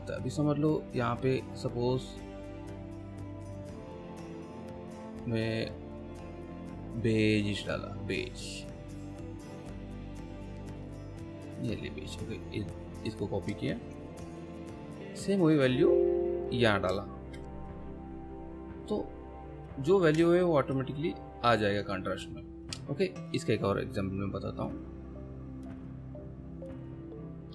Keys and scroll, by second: 13.7 ctrl+c, 17.2 ctrl+v, 20.2 ctrl+space.